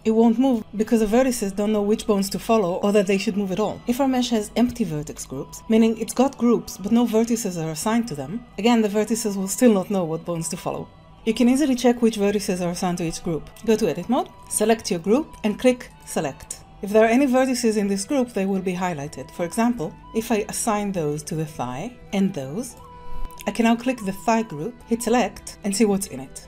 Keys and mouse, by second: 13.5 Tab, 13.7 alt+a, 15.9 click, 19.4 click, 21.4 click, 22.0 alt+a, 22.7 click, 23.2 alt+a.